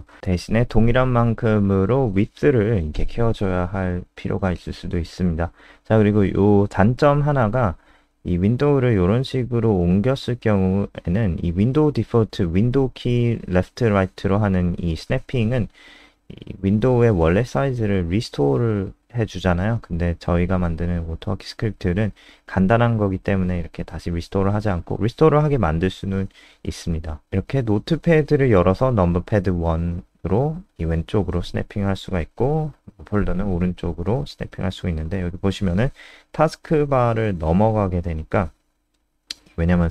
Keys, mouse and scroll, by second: 3.9 click, 13.3 super+Left, 16.3 super+Right, 17.4 click, 19.7 KP_2, 24.5-25.0 typing, 25.0 Return, 26.4 KP_1, 28.7 click.